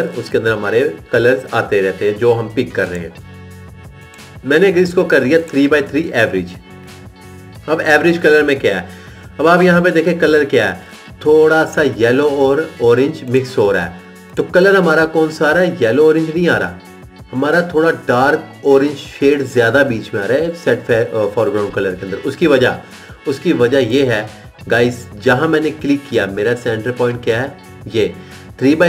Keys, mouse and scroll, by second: 25.7 click.